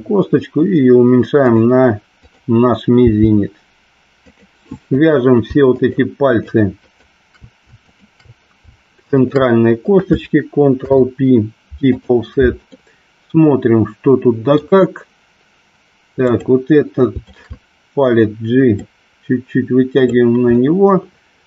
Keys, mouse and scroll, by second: 1.5 click, 3.1 g, 4.4 click, 5.0 click, 5.8 shift+click, 6.4 shift+click, 6.9 shift+click, 7.9 shift+click, 9.3 shift+click, 10.9 ctrl+p, 12.8-14.5 middle drag, 17.3 shift+click, 19.0-20.3 drag, 20.6-21.4 middle drag.